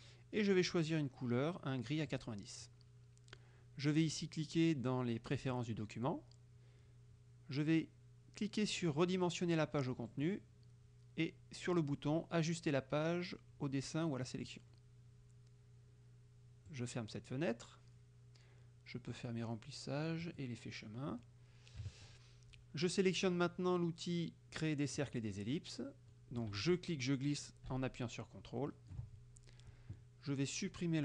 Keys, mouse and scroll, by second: 2.1 click, 5.6 click, 10.1 click, 14.3 click, 16.8 click, 19.2 click, 20.3 click, 21.9 KP_Subtract, 25.0 click, 25.6 click, 26.8-29.1 drag.